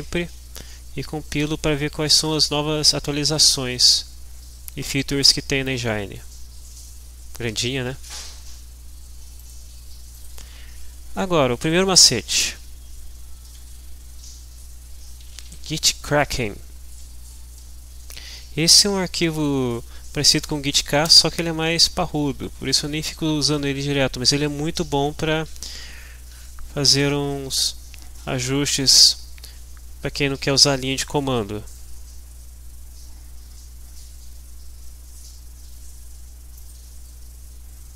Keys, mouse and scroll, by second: 0.9-1.5 scroll down 1, 1.8-2.5 scroll down 1, 3.0-3.7 scroll down 2, 3.8-5.3 scroll down 2, 5.7-6.8 scroll down 6, 7.3-8.2 scroll down 2, 8.2 scroll down 2, 8.4-9.4 scroll up 2, 9.4 click, 10.1 click, 15.0-15.9 typing, 16.7 Down, 17.2 Up, 21.2 Return, 36.6 click.